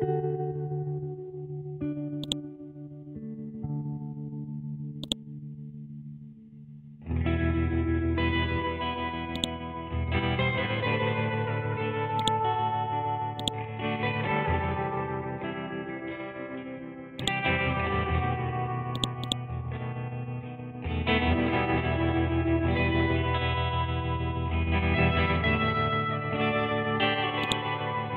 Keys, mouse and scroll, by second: 2.2 scroll up 1, 2.2-3.9 drag, 3.9 scroll down 1, 5.0-7.5 drag, 7.5-9.3 scroll up 1, 9.3-14.8 drag, 14.8 scroll up 1, 15.9 scroll down 1, 17.2 click, 18.0 scroll down 1, 18.9 click, 19.7 scroll up 1, 20.8 scroll down 1, 23.4 scroll up 1, 24.4 scroll down 1, 27.4-28.1 drag.